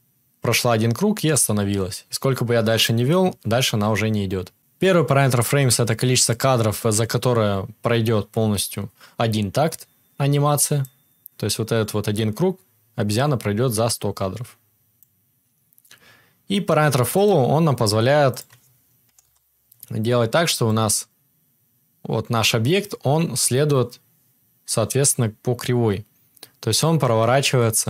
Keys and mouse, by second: 8.9-17.2 drag, 8.9-24.3 right drag, 18.5-24.3 drag, 24.3-27.8 middle drag.